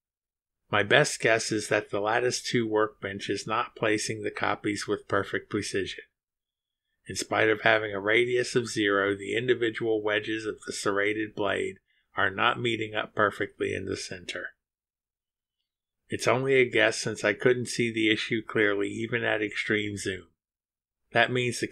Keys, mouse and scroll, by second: 1.6 click, 3.4 click, 4.6 space, 7.6-8.2 scroll up 2, 8.4-9.0 scroll up 2, 12.8 click, 13.8 space, 17.5 click, 18.0 space, 20.8 click, 21.2 space.